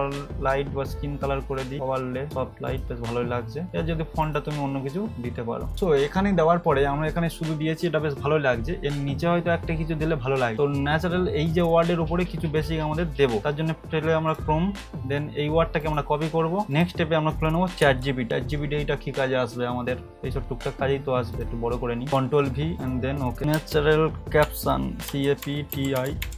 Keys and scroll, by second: 18.0 c, 22.1 ctrl+v, 23.5 ctrl+space, 24.4-26.3 typing.